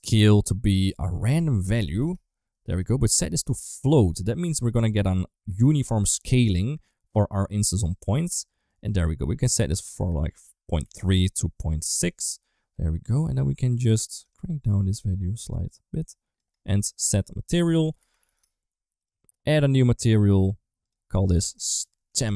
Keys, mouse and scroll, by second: 0.8-2.5 drag, 2.9-3.4 drag, 3.8 click, 6.2-7.7 drag, 8.5 middle click, 9.3-11.6 drag, 12.9 middle click, 14.2-16.2 shift+drag, 16.6 middle click, 17.3 shift+a, 19.8 click, 20.6 click, 21.0 click, 21.2-22.3 shift+drag.